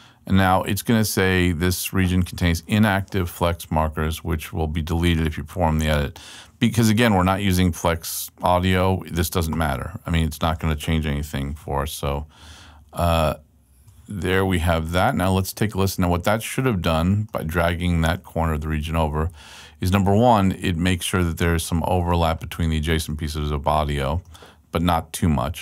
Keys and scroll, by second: 12.0 super+Left, 18.6 super+Right, 25.2 super+Right.